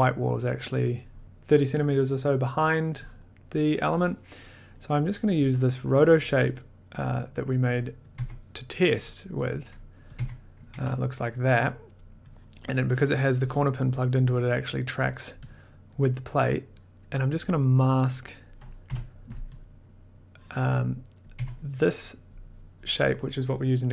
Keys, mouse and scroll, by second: 3.1 click, 4.9 scroll, 5.0 middle click, 5.1 middle click, 5.5 click, 6.2 middle click, 7.0 click, 8.1 click, 8.2 1, 9.2 middle click, 10.1 click, 10.1-11.2 typing, 12.4 click, 13.1 middle click, 13.6 click, 14.9 click, 15.2 middle click, 15.5 click, 16.1 click, 17.0 click, 17.5 middle click, 18.1 click, 18.9 m, 19.6 click, 20.9 click, 21.3 click, 21.3 1.